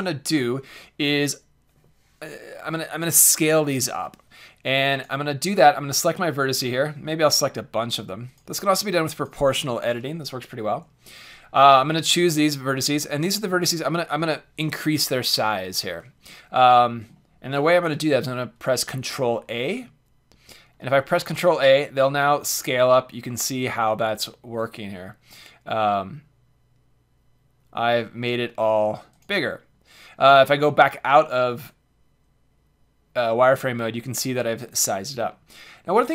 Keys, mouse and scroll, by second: 4.9-6.9 drag, 7.3-11.0 drag, 11.1-15.0 drag, 11.1-13.0 right drag, 16.2 middle click, 16.7-18.2 drag, 19.6 ctrl+a, 29.2-32.6 drag, 30.3 z, 34.6-36.1 middle drag.